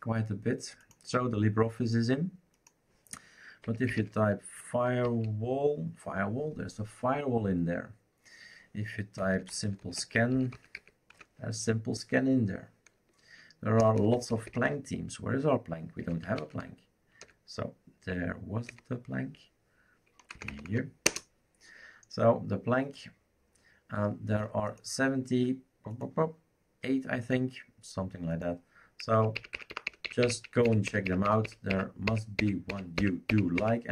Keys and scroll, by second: 3.4-5.2 typing, 9.2-11.6 typing, 13.8-14.6 typing, 15.8-18.7 typing, 20.3 Down, 20.5 Down, 20.6 Down, 21.0 Return, 29.1 Up, 29.3 Up, 29.5 Up, 29.7 Up, 29.9 Up, 30.2 Up, 30.6 Up, 30.8 Up, 31.0 Up, 31.2 Up, 31.4 Up, 31.7 Up, 32.0 Up, 32.4 Up, 32.7 Up, 32.9 Up, 33.3 Up, 33.5 Up.